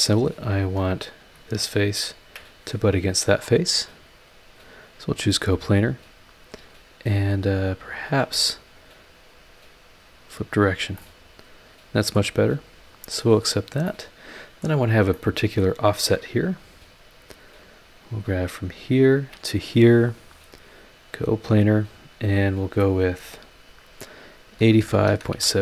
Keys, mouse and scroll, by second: 0.5 scroll down 1, 1.3 click, 2.2 ctrl+shift+click, 2.6 ctrl+shift+scroll down 4, 4.5 click, 8.7 click, 10.6 scroll down 2, 11.0-12.3 middle drag, 13.0 click, 13.6 scroll up 1, 13.8 middle click, 15.1-15.8 middle drag, 15.8-16.6 scroll up 4, 17.2 click, 18.0 scroll down 2, 18.5-18.8 scroll up 3, 19.1 ctrl+click, 20.2 click, 22.4 click, 24.5-25.6 typing.